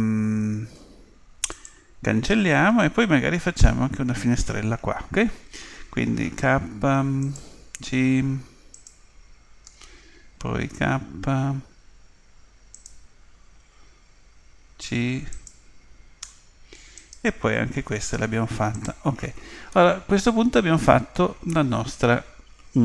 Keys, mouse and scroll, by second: 6.4 k, 10.7 k, 17.0-18.8 right drag, 17.9 Delete, 19.7-21.6 middle drag.